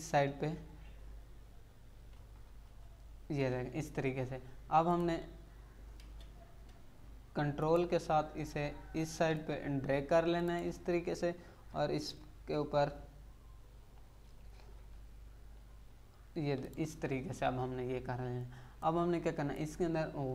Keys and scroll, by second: 2.1 Left, 6.0 space, 14.9 Right.